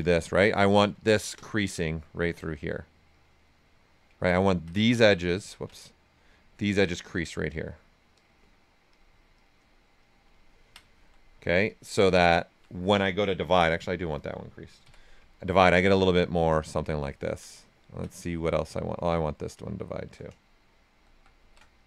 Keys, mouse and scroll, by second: 0.0 space, 0.7 click, 1.6 click, 1.6 typing, 2.2 right click, 3.1 click, 3.4 right click, 4.1 ctrl+right click, 4.9 click, 6.1 click, 6.8 ctrl+z, 7.4 space, 8.9 click, 10.4 ctrl+right click, 11.6 alt+click, 13.8 click, 14.8 typing, 15.3 ctrl+right click, 16.4-20.8 right drag, 20.8 shift+f, 21.3 shift+d, 21.7 click.